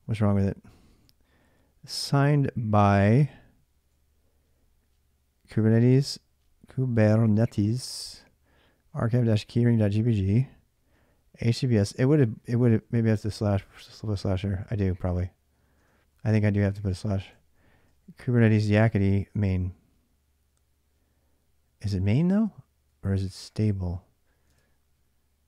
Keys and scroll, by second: 0.0-0.8 typing, 3.1-3.6 typing, 7.0-10.6 typing, 12.1 l, 12.5 l, 12.6 l, 12.8 l, 15.1-18.0 typing, 22.7-23.5 l, 24.3 alt+Tab.